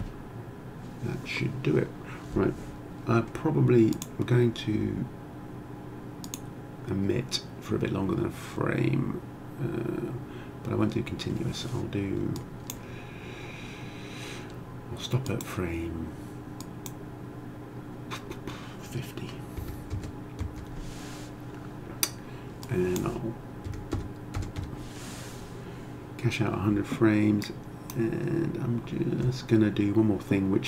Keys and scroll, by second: 19.6 5, 20.0 0, 20.5 Return, 23.7 1, 24.0 0, 24.6 Return.